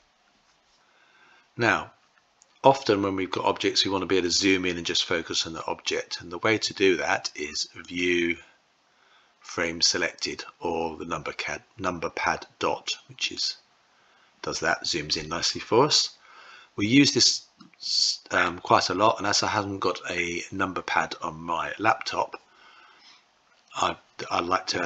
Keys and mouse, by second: 7.7-13.2 drag, 17.4-18.4 middle drag.